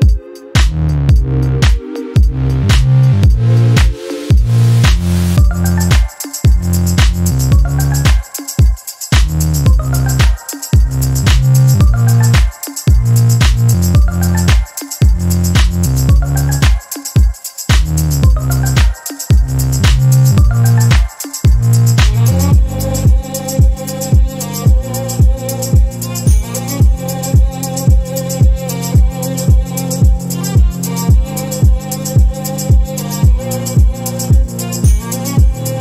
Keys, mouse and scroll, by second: 0.3 click, 2.1 click, 4.4 shift+click, 6.7 click, 7.3 space, 8.1-10.1 drag, 10.7 click, 13.1 click, 15.2 click, 16.0 click, 16.9 Delete, 18.5-18.8 shift+scroll up 1, 19.6 ctrl+shift+KP_Subtract, 20.9 space, 21.5-21.9 scroll up 1, 23.1-23.8 ctrl+scroll up 4, 24.2 ctrl+click, 25.8 click, 27.2 click, 28.8 click, 29.2-29.5 ctrl+scroll down 2, 30.2 ctrl+KP_5, 33.9 space, 34.7-35.2 ctrl+scroll up 4, 35.5 ctrl+click.